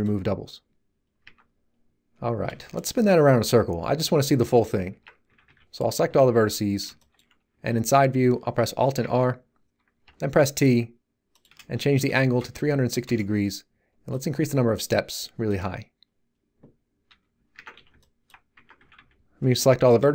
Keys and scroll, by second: 1.2 Tab, 4.9 Tab, 5.2 a, 6.0 3, 9.0 alt+r, 10.0 t, 11.9 3, 12.1 6, 12.4 0, 13.0 Return, 17.0 t, 17.5 Tab, 17.7 z, 18.5 Tab, 18.7 a.